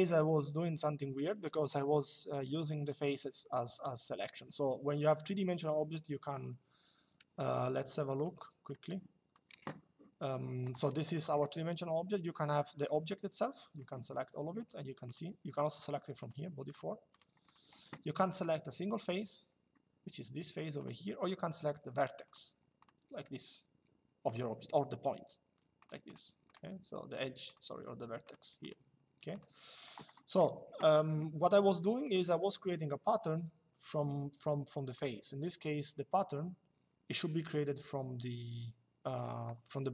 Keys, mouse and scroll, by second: 6.9 Escape, 8.4 click, 10.9 middle click, 12.5 click, 14.7 click, 15.9 click, 20.5 click, 22.0 click, 24.0 click, 25.5 click, 30.7 middle click, 31.7 click, 34.6 click, 38.9 click.